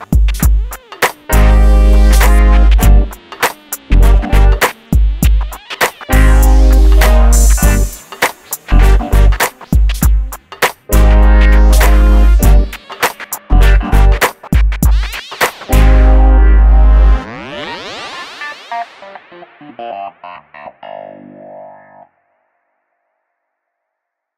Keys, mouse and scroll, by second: 0.3-2.8 middle drag, 2.8 scroll down 1, 3.5 middle click, 5.1 click, 6.5 Delete, 6.9 click, 7.2-7.8 scroll down 1, 7.8 click, 8.8 g, 9.0 middle click, 10.4 m, 11.1 click, 12.5 middle click, 13.3 scroll up 1, 13.8-16.2 middle drag, 16.2-16.5 scroll up 1, 16.5 middle click, 17.2 scroll down 1, 17.9 shift+middle click.